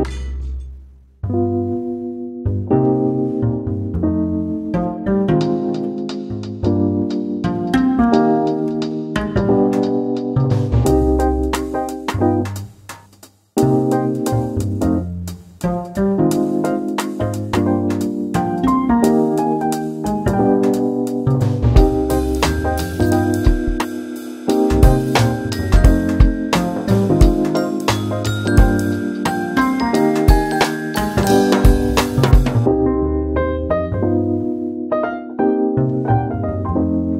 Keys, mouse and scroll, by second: 0.1 Tab, 0.8 shift+a, 2.4 scroll down 1, 2.6-3.7 scroll up 2, 3.7 KP_7, 4.1 s, 6.7 g, 8.8 KP_3, 9.2 Tab, 10.3 e, 12.2 Tab, 13.9-15.6 drag, 15.6 ctrl+a, 16.2-17.5 middle drag, 17.5 right click, 18.9 click, 19.4 right click, 20.3 scroll up 1, 20.8-22.6 middle drag, 22.6 shift+s, 23.6 shift+a, 27.4 g, 29.0 s, 31.9 KP_Divide, 33.5 scroll down 2, 33.8-35.2 middle drag, 35.2 g.